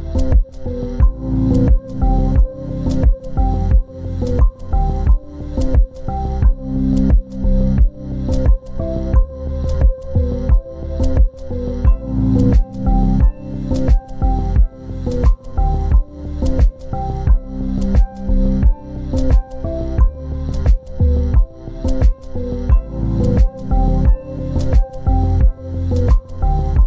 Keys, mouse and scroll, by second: 19.5 g, 19.5 ctrl+space, 19.8 ctrl+click, 21.3 double click, 23.2 double click.